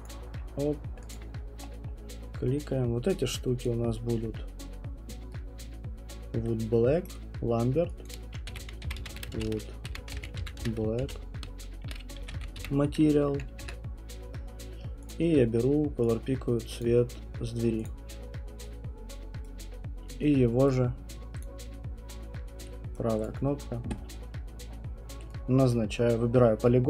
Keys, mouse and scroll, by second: 0.0 click, 1.1 scroll, 1.1 alt+click, 1.4 alt+click, 1.6-2.7 scroll, 3.1 right click, 3.6 click, 6.2 middle click, 7.0 right click, 8.0 click, 8.2-13.0 typing, 13.6 Return, 15.1 click, 16.8 click, 17.8 click, 18.2 middle click, 18.3 middle click, 18.3 middle click, 19.4 right click, 20.7 right click, 21.4 click, 21.8 middle click, 22.0 middle click, 22.9 right click, 23.2 click.